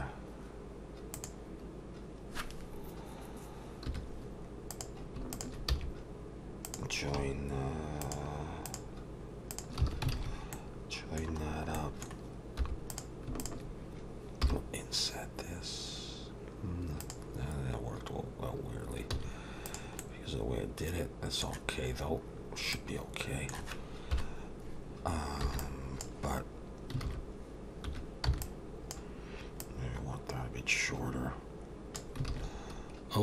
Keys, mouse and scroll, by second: 1.2 click, 3.9 2, 4.7 click, 5.3 shift+click, 5.7 f, 6.7 click, 8.0 shift+click, 8.6 click, 9.8 f, 10.1 alt+a, 10.5 middle click, 11.5-12.0 scroll down 2, 11.7 middle click, 12.6 3, 12.9 click, 13.4 shift+click, 14.4 i, 19.1 x, 20.0 middle click, 21.9-22.3 scroll up 2, 22.3-23.0 scroll down 3, 22.7 middle click, 24.1 KP_7, 25.5 b, 27.1 alt+a, 27.9 1, 28.3 b, 29.6 click, 32.3 alt+a, 32.8-33.2 scroll up 1.